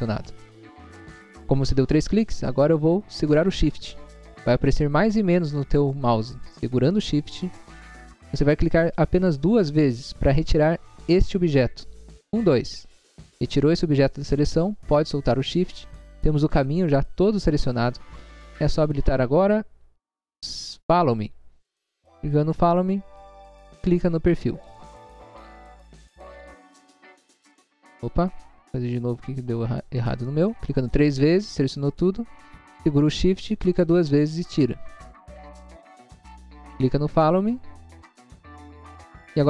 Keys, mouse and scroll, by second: 15.6 scroll down 1, 18.8 click, 21.7 click, 24.6 click, 26.4 scroll down 1, 27.7 scroll down 1, 27.9 scroll up 1, 28.5 space, 29.0 scroll up 1, 30.1 scroll up 1, 30.6 click, 30.8 click, 31.0 click, 31.2 click, 37.1 click, 38.2 click.